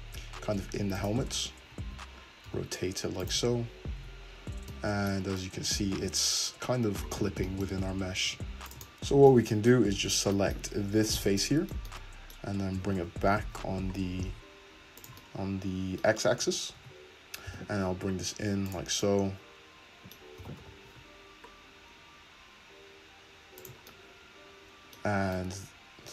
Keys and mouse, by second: 1.3 `, 2.5 r, 2.9 r, 3.2-8.3 shift+middle drag, 3.5 `, 4.0 `, 7.8 `, 8.3 click, 8.3 `, 8.5-11.2 shift+middle drag, 9.4 Tab, 10.8 3, 11.2 click, 12.0-15.1 middle drag, 12.8 g, 16.8 Tab, 17.5 g, 20.4 g, 20.8-23.7 shift+drag, 21.0 g, 25.2 Tab, 25.2-26.1 drag.